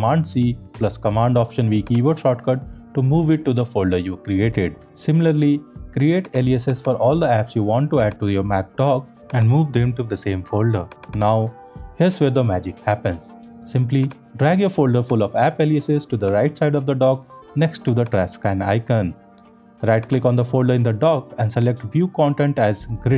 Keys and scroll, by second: 0.2 alt+super+v, 9.7 super+c, 11.9 alt+super+v.